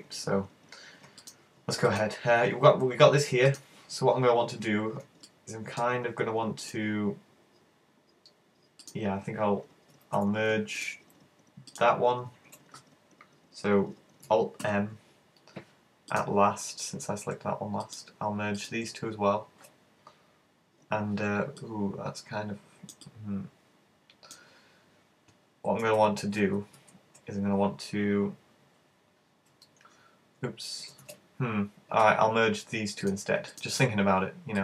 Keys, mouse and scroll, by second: 1.3 right click, 2.0 shift+right click, 3.6 shift+right click, 5.3 middle click, 6.6 right click, 8.9 right click, 10.8 right click, 11.7 shift+right click, 14.7 alt+m, 17.9 right click, 18.6 shift+right click, 21.6 middle click, 23.1 middle click, 25.8 super+z, 26.5 z, 26.8 z, 29.6 alt+r, 31.2 z, 33.1 shift+right click, 33.6 shift+right click.